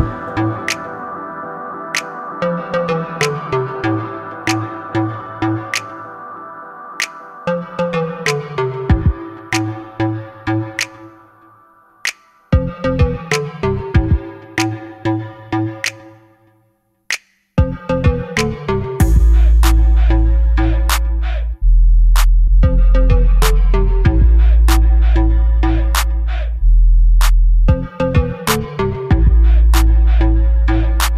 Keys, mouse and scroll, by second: 0.3 click, 1.2 click, 2.7 KP_Add, 8.3-9.5 drag, 11.2-12.7 drag, 18.5 click, 18.9 click, 21.0 KP_0, 24.7 click, 25.6-30.4 drag.